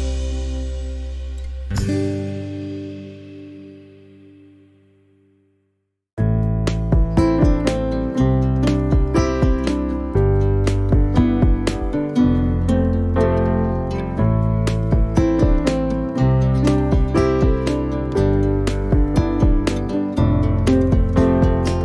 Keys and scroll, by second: 3.3 Delete, 5.3 Delete, 13.7 m, 19.8 1, 20.1 KP_Decimal, 20.2 5, 20.9 Return.